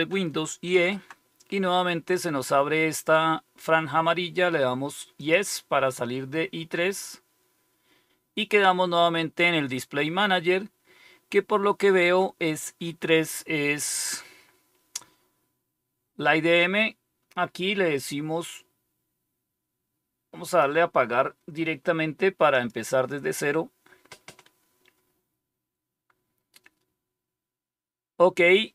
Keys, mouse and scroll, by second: 0.7 super+e, 5.1 click, 17.9 click, 20.4 click, 22.5 click.